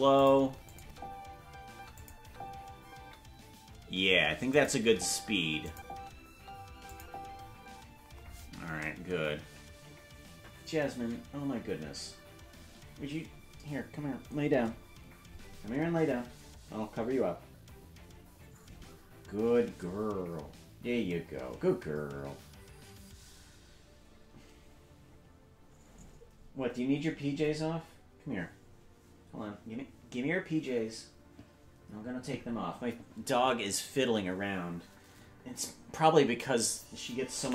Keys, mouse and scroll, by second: 0.7 click, 0.8 space, 2.0 click, 2.0 space, 2.2 space, 4.5 click, 4.5 space, 4.8 space, 5.7 click, 5.9 space, 6.9 click, 6.9 space, 7.6 space.